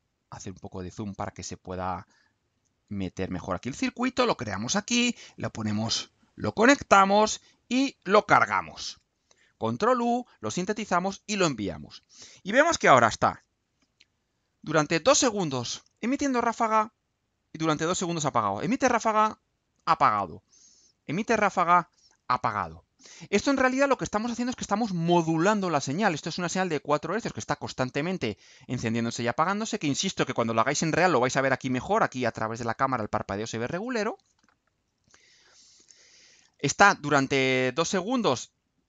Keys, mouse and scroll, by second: 0.0-1.2 ctrl+right drag, 2.3-3.0 drag, 4.4 click, 5.2 click, 5.8 click, 6.9-8.0 drag, 8.7 ctrl+u.